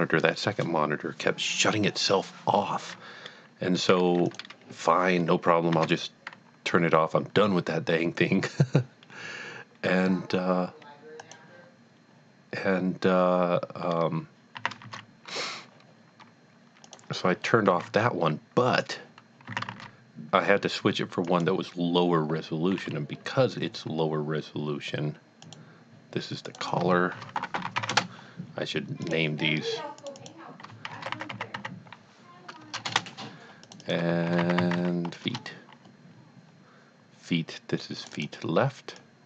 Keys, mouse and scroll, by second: 4.3 click, 5.7 shift+a, 11.2 click, 14.5 click, 14.9 z, 16.9 click, 17.7 typing, 18.8 click, 19.5 s, 19.8 z, 21.2 click, 25.4 click, 26.5 click, 26.6 double click, 27.1-27.7 typing, 27.9 Return, 29.0 click, 30.0 click, 30.9-32.8 typing, 32.9 Return, 33.7 click, 33.8 double click, 34.5 typing, 35.2 KP_Enter, 38.0 KP_Enter, 38.1 double click, 39.0 click.